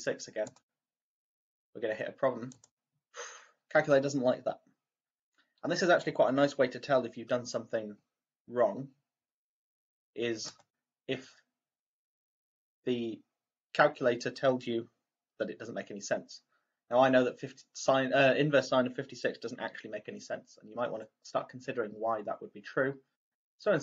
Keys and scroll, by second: 0.4 ), 2.4 =, 10.4 Left, 23.2 Delete, 23.3 Delete.